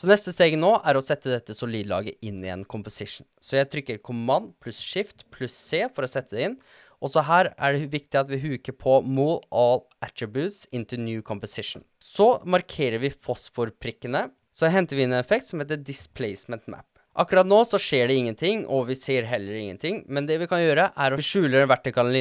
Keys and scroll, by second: 4.4 shift+super+c, 14.9-16.7 typing.